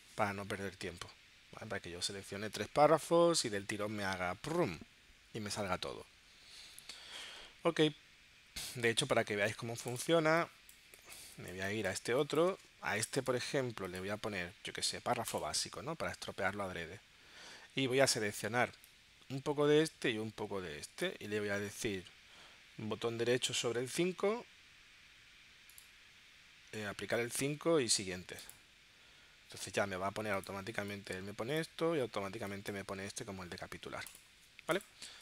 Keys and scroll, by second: 10.1 space.